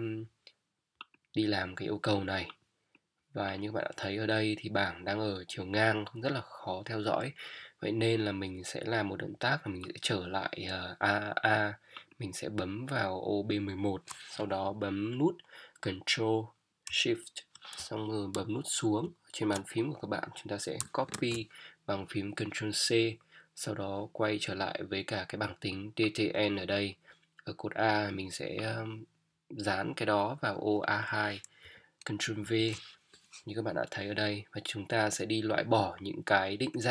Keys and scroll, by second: 18.7 ctrl+shift+Down, 21.1 ctrl+c.